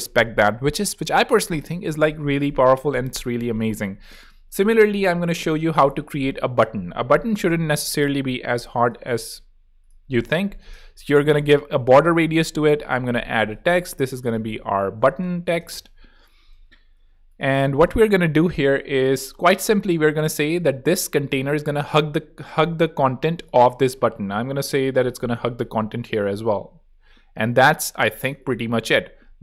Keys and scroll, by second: 5.7 BackSpace, 7.5 a, 10.3 8, 10.5 Return, 12.5-16.2 typing, 16.9 Escape.